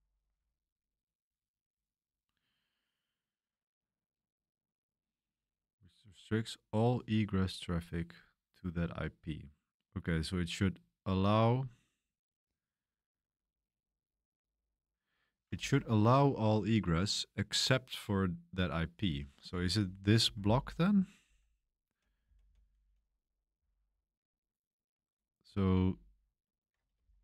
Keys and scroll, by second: 19.9-22.4 typing, 24.1-25.5 typing, 26.6-27.2 typing.